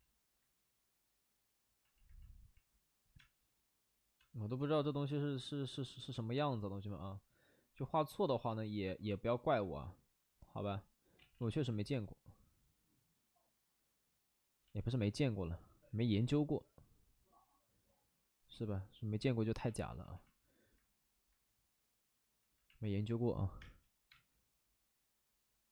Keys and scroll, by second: 11.1 ctrl+z, 11.3 ctrl+z, 11.5 ctrl+z, 14.6 ctrl+z, 14.8 ctrl+z, 17.2 ctrl+z, 23.6 space, 24.1 space.